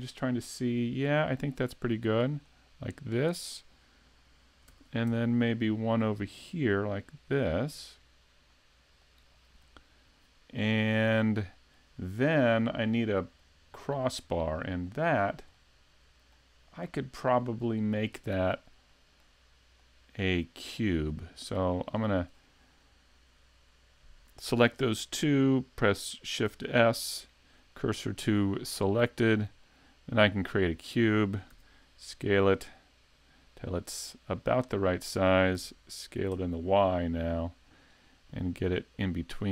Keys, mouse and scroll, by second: 1.1 middle click, 2.1 click, 3.4 click, 4.7 shift+d, 9.6 middle click, 13.0 middle click, 15.2-16.2 scroll up 4, 15.6 middle click, 16.6-17.2 scroll down 3, 17.2 middle click, 18.9 shift+middle click, 19.8 middle click, 22.0 shift+right click, 26.5 shift+s, 29.6 click, 30.6 click, 31.5 s, 34.1 scroll up 3, 34.5 middle click, 35.6 s.